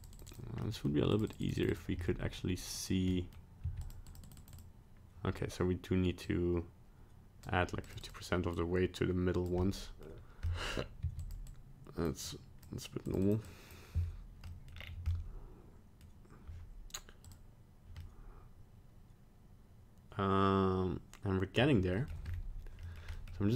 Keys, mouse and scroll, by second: 0.0 click, 0.1 click, 0.3 click, 0.6 middle click, 1.1 click, 1.3 click, 1.4 click, 1.6 click, 1.7 click, 2.0 middle click, 2.6 click, 2.8 click, 3.1 middle click, 3.6 f, 4.1 click, 4.2 click, 4.4 click, 4.5 click, 6.2 click, 7.9 click, 8.0 click, 8.6 click, 9.6 middle click, 10.4 middle click, 11.0 f, 11.5 click, 12.3 click, 13.1 click, 13.2 click, 13.5 click, 14.4 middle click, 14.7-15.1 scroll down 4, 15.1 middle click, 15.2 middle click, 17.2 click, 18.0 middle click, 21.9 middle click, 22.2-22.8 scroll up 2, 22.8 middle click, 23.1 middle click.